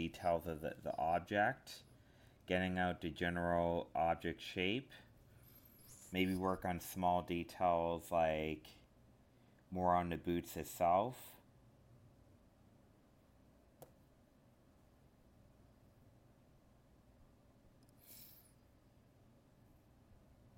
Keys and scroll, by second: 4.6 alt+space, 10.4 ctrl+z, 11.5 alt+space, 13.3 ctrl+z, 17.1 alt+space, 19.3 ctrl+z, 20.2 alt+space.